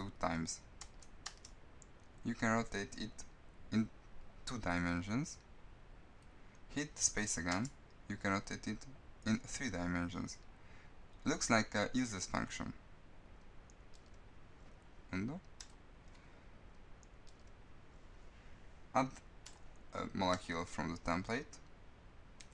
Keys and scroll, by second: 6.8 space.